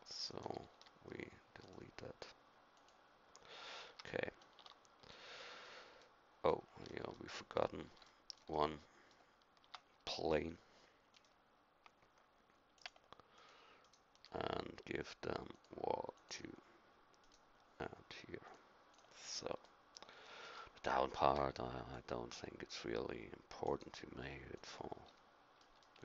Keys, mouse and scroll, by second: 0.7 x, 3.9 a, 4.6 Tab, 9.6 Tab, 11.1-12.7 drag, 21.3 c.